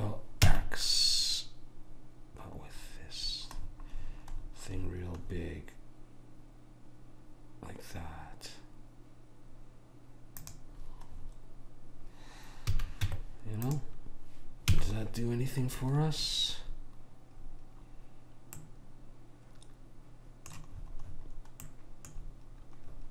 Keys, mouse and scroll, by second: 11.3-12.8 middle drag, 12.8 a, 13.2 Tab, 14.8 a, 16.0 middle click, 20.0 middle click, 20.9-21.8 scroll up 1, 21.8-23.1 middle drag.